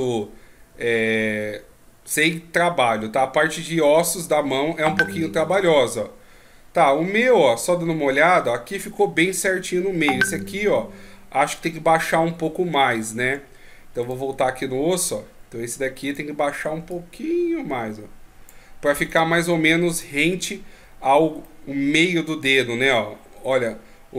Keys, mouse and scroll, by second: 8.5 middle click, 13.2 Tab, 14.0 right click, 14.3 Tab, 16.0 right click, 16.9 click, 19.1 right click, 19.4 Tab, 19.9 right click, 20.2 Tab, 21.4 middle click.